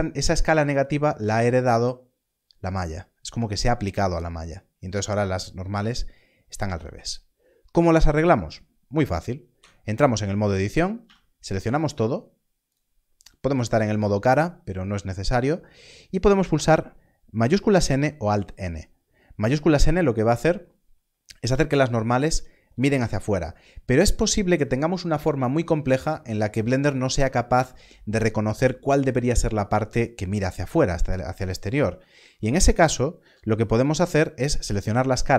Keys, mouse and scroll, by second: 9.5 click, 10.6 Tab, 11.0 a, 20.2 a, 22.2 shift+n, 32.1 alt+a.